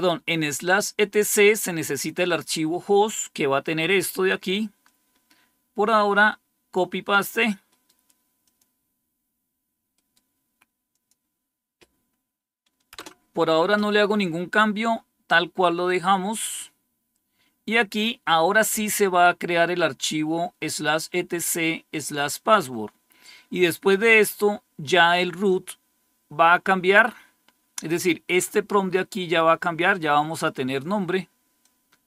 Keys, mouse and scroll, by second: 4.7-6.7 drag, 7.6 right click, 8.4 click, 9.8 right click, 10.8 click, 12.8 Return, 15.5-16.1 scroll down 1, 28.8-30.4 drag, 31.5-32.0 drag.